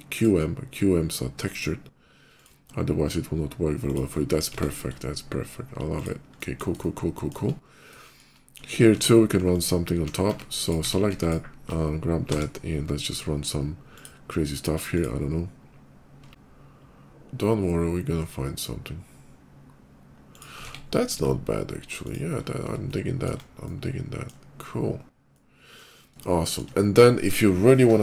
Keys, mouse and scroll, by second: 3.7 click, 4.0 middle click, 4.1 middle click, 4.4 Tab, 5.8 click, 6.0 middle click, 6.6 shift+middle click, 7.4 shift+middle click, 7.8 shift+middle click, 8.2 shift+middle click, 8.7 Tab, 9.3 alt+Tab, 9.9 Tab, 10.5 click, 11.0 alt+click, 11.1 Tab, 12.1 d, 14.8 click, 17.3 ctrl+middle click, 18.0 ctrl+middle click, 18.7 ctrl+click, 20.2 ctrl+click, 20.4 Tab, 20.9 middle click, 21.0 middle click, 21.7 click, 21.7 middle click, 22.1 middle click, 22.5 shift+middle click, 22.6 shift+middle click, 23.5 shift+middle click, 25.1 shift+middle click, 26.1 middle click, 26.6 scroll up 1.